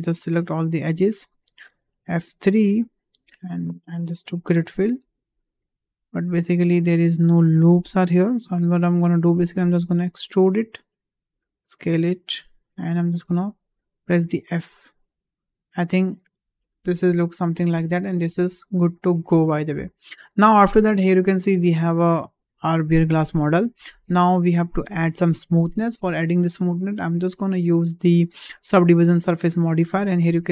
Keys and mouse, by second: 2.8 F3, 6.7 2, 7.5 alt+click, 10.0 e, 11.2 s, 13.2 f, 14.4 middle click, 14.9 Tab, 16.6-18.0 middle drag, 18.7 `, 19.8-20.1 middle drag, 21.9-23.1 middle drag, 23.3 `, 24.4 click, 27.5-29.8 drag.